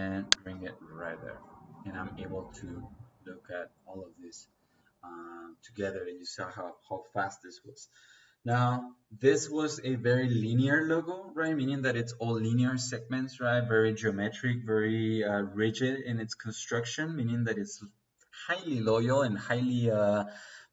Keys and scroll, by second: 0.4 Escape.